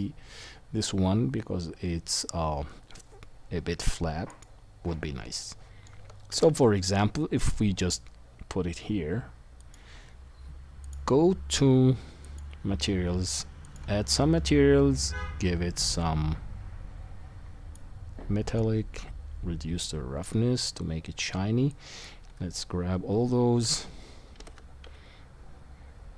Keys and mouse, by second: 0.0 click, 0.0 middle click, 0.0 right click, 6.3 g, 9.7-10.8 right drag, 10.9-12.3 right drag, 23.6 KP_1, 24.3 g.